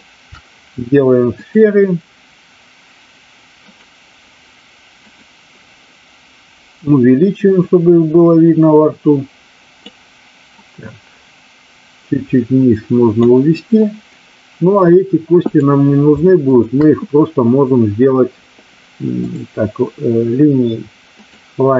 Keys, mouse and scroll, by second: 1.4-3.7 drag, 5.0 click, 6.7-9.7 drag, 10.5-13.1 drag, 15.5 click, 16.5 shift+click, 19.1-21.4 drag.